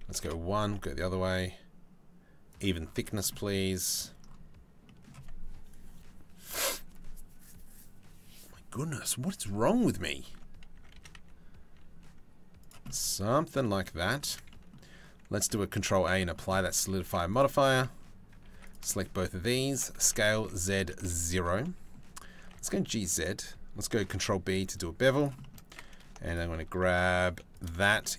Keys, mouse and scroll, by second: 2.1 middle click, 2.9 middle click, 4.4 middle click, 9.4 middle click, 9.9 Tab, 10.3 a, 10.5 s, 12.4 middle click, 13.2 middle click, 13.6 Tab, 14.1 click, 15.4 ctrl+a, 15.7 Tab, 15.8 middle click, 16.6 ctrl+r, 18.0 ctrl+r, 19.6 s, 21.2 middle click, 22.0 g, 23.6 ctrl+b, 25.0 shift+middle click, 25.9 alt+click, 26.4 middle click, 26.9 3, 27.2 middle click, 27.4 shift+middle click, 27.6 middle click.